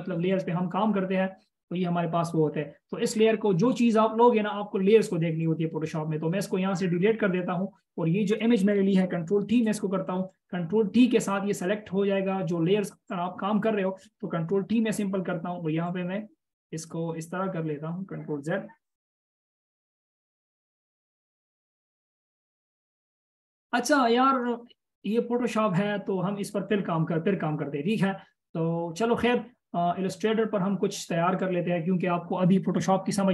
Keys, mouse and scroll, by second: 10.0 ctrl+t, 14.7 ctrl+t, 18.8 ctrl+z, 19.5-21.5 scroll down 1, 31.8 space, 32.7 right click.